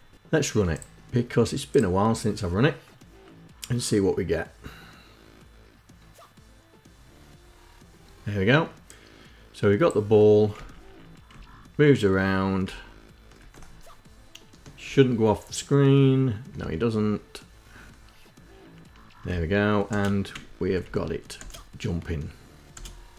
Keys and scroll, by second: 10.3 Down, 11.1 Right, 12.4 Up, 19.0 Left, 19.7 space, 20.7 Left, 21.2 space, 22.6 space.